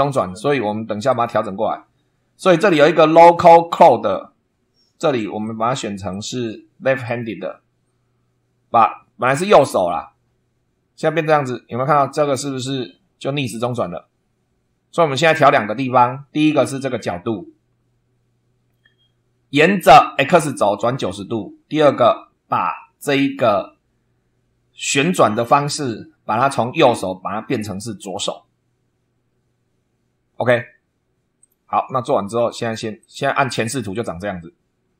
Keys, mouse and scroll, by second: 1.0 click, 5.4 click, 6.1 click, 7.0 click, 19.6 click, 31.4 click, 33.0 click, 34.8 scroll up 1.